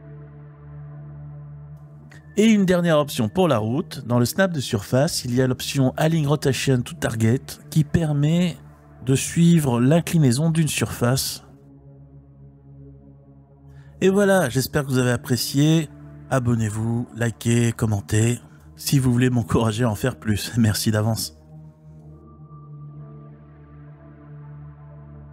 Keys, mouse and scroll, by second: 1.9-8.9 drag, 10.3-11.2 drag, 11.2 g, 22.1 click.